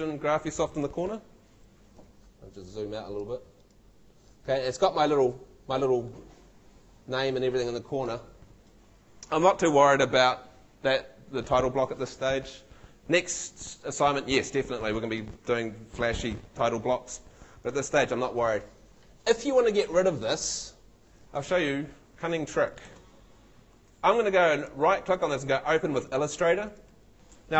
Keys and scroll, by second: 22.9 super+w.